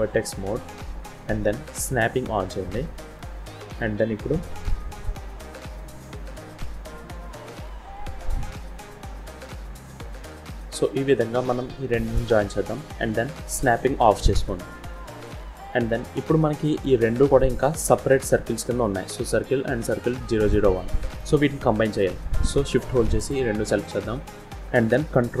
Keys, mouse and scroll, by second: 1.8 click, 2.7 shift+middle click, 3.1-4.6 scroll up 1, 5.1 shift+middle click, 5.1 scroll up 1, 6.1 g, 8.2 middle click, 10.5 scroll up 2, 11.1-11.8 scroll down 2, 11.4 middle click, 13.6 click, 14.5 scroll down 1, 14.8 shift+middle click, 15.4 middle click, 16.6 click, 17.3 click, 17.8 middle click, 21.1 middle click, 21.9 scroll down 1, 23.0 shift+click.